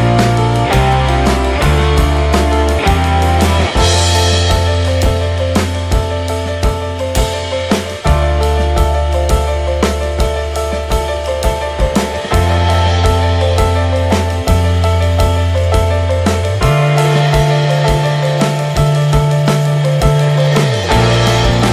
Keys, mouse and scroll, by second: 0.2 shift+d, 1.9 middle click, 2.4-3.8 ctrl+shift+right drag, 3.8-5.0 drag, 5.6-10.0 drag, 10.0-10.7 middle drag, 10.7-11.6 scroll down 2, 11.6-12.8 scroll down 1, 12.8-13.1 scroll up 5, 13.1-14.6 drag, 14.6 scroll down 9, 15.5 scroll up 3, 15.7 ctrl+shift+click, 16.3-16.7 scroll up 1, 16.7-20.7 drag.